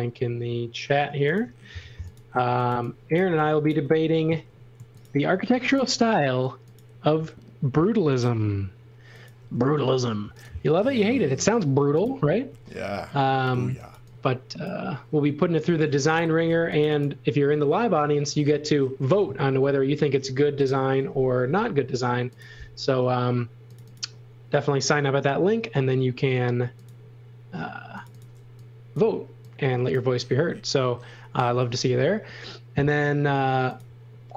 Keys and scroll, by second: 1.9-3.2 typing, 4.5 m, 6.0 s, 9.4 m, 12.6-14.4 typing, 15.8 space, 16.4 f, 19.3 a, 20.6 Return, 20.6 4, 28.4 e, 31.9 a.